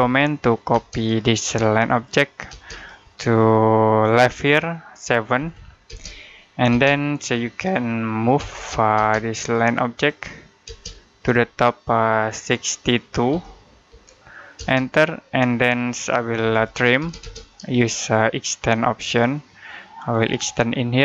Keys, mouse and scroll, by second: 0.0-0.6 typing, 1.3 click, 2.3 space, 2.6 click, 5.2 7, 5.7 space, 8.2 m, 8.8 space, 9.3 click, 10.5 space, 11.0 click, 13.1-14.4 typing, 16.0-16.9 typing, 18.8 shift+click, 19.9 shift+click.